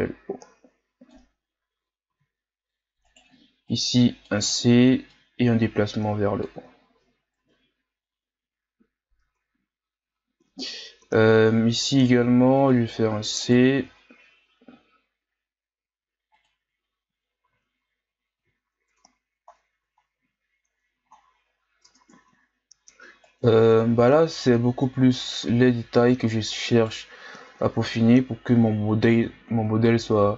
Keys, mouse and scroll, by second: 2.1 z, 3.1 right click, 3.3 c, 5.1-6.5 drag, 6.5 z, 7.4 Tab, 7.8-8.7 scroll down 4, 8.7-9.3 scroll up 4, 9.3 Tab, 11.0 z, 12.0 right click, 12.2 c, 13.8 z, 14.7 g, 17.5 z, 18.4 z, 18.6 scroll down 2, 18.9 Tab, 19.5-20.4 scroll down 6, 20.4-21.9 scroll up 10, 21.9 Tab, 22.3-23.2 ctrl+scroll up 2, 23.2 right click, 27.2-27.5 scroll down 2, 27.5 Tab, 28.0-28.8 scroll down 2, 28.8-29.5 scroll up 3, 29.5 Tab.